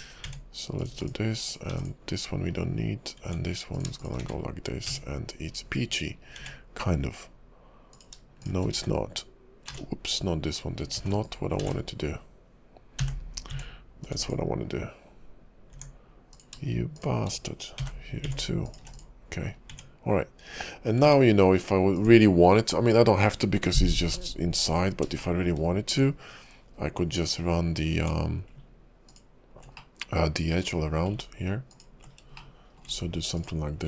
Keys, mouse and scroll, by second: 0.2 Tab, 0.8 click, 0.9 x, 1.5 click, 1.7 x, 2.4-3.2 scroll down 1, 3.2 Tab, 3.7 click, 4.0 shift+click, 4.5 1, 4.9 Tab, 5.5-5.9 scroll down 3, 5.9 shift+click, 6.1 scroll up 2, 6.3 Tab, 6.8 scroll up 2, 7.9 click, 8.4 shift+click, 9.0 1, 9.7 z, 11.8 ctrl+z, 13.1 j, 13.5 Tab, 14.1 click, 14.1 x, 15.7 Tab, 16.3 click, 16.9 shift+click, 17.9 j, 18.2 Tab, 18.6 click, 18.8 x, 19.4 scroll down 3, 19.7 Tab, 21.0 Tab, 21.9 click, 24.1 middle click, 24.9 scroll down 2, 25.2 shift+middle click, 26.0 Tab, 29.1 ctrl+click, 29.8 middle click, 30.7-31.7 scroll down 3, 31.7 ctrl+click, 33.3 ctrl+click.